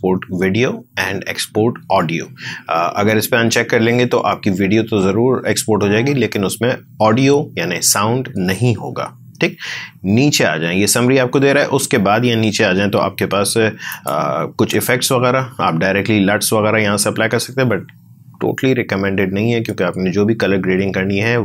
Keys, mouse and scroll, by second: 9.9-10.8 scroll down 1, 13.9 click, 15.6 scroll down 1, 18.1-18.4 scroll up 1.